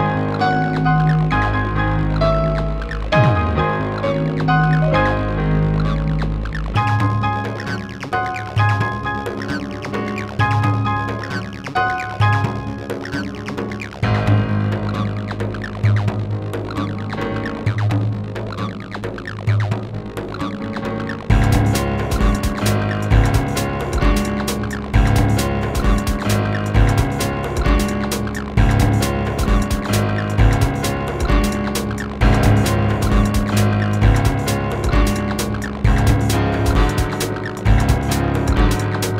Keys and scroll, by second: 13.2 ctrl+z, 20.1 ctrl+z.